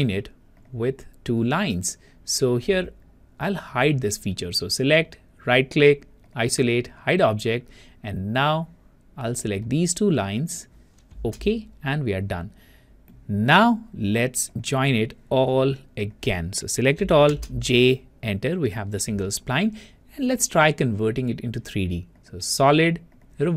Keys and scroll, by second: 17.5 Return, 17.7 j.